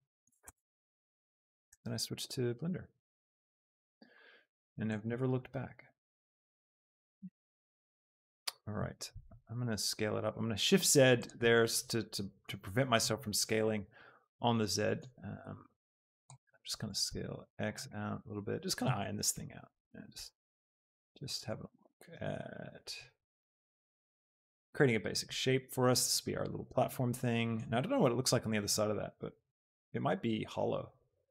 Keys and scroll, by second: 0.4 Tab, 1.8 e, 2.9 Escape, 3.7 ctrl+z, 7.0 alt+e, 7.3 Escape, 7.7 s, 9.2 shift+z, 15.4 x, 20.2 s, 20.5 z, 21.6 Escape, 22.4 y.